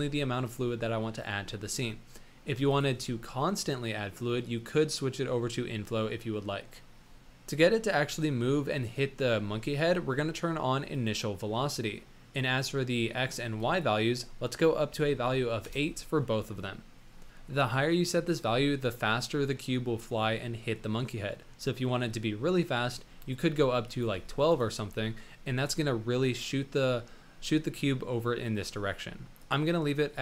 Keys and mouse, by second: 1.7 middle click, 2.8-7.2 drag, 7.7-8.2 middle drag, 10.9 click, 13.5-15.6 drag, 23.9-24.4 drag, 25.0 middle drag, 29.4-30.2 drag.